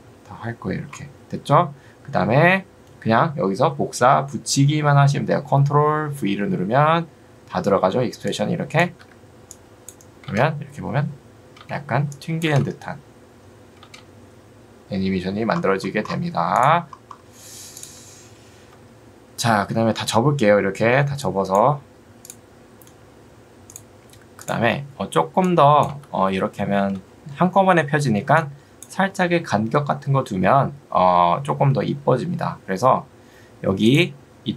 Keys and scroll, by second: 9.0 Escape, 10.4 space, 18.8 u, 26.0 space.